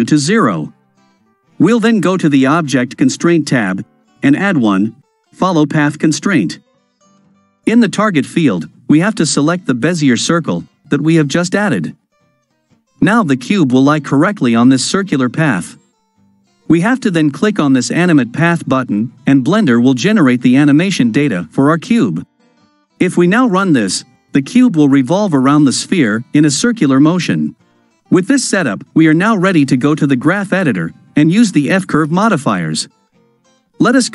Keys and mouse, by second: 4.2-6.1 drag, 18.1 click, 23.0 click, 32.3 click.